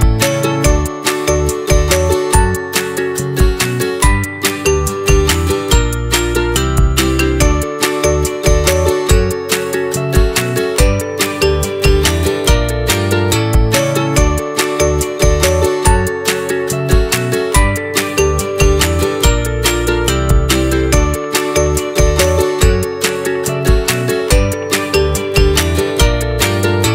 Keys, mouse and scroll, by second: 0.8 click, 1.4-2.8 middle drag, 2.8-3.3 scroll down 2, 3.3 middle click, 3.9 click, 5.2 g, 9.2 r, 10.6-11.2 middle drag, 11.2-11.9 scroll down 2, 11.9-12.6 scroll up 2, 12.6-13.9 middle drag, 13.9 s, 14.9-16.7 middle drag, 16.7 g, 19.1 middle click, 19.8 click, 20.2-20.7 scroll up 4, 20.7 click, 21.0-21.6 scroll down 4, 21.6-23.6 middle drag, 23.7-24.7 shift+middle drag, 24.7-25.5 shift+right drag, 25.5 shift+a.